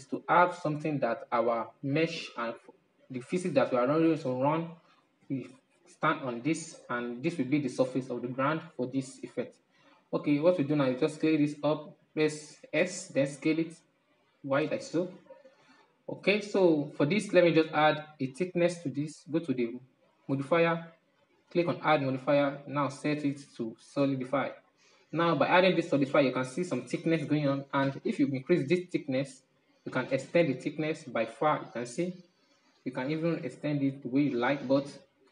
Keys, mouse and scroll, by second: 3.9-8.6 middle drag, 12.9 s, 15.9-19.0 middle drag, 19.9 click, 21.3-24.4 drag, 25.1-28.9 middle drag, 28.9-30.4 drag, 30.4 middle click, 31.2-31.7 scroll down 8, 31.8-33.2 middle drag, 33.2-35.3 drag.